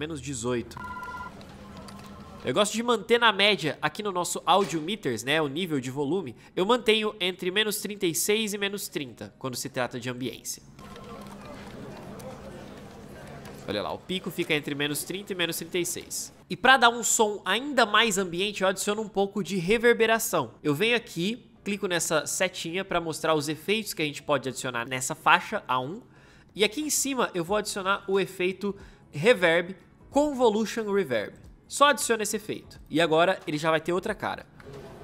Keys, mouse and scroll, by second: 0.6 space, 10.6 space, 34.4 space.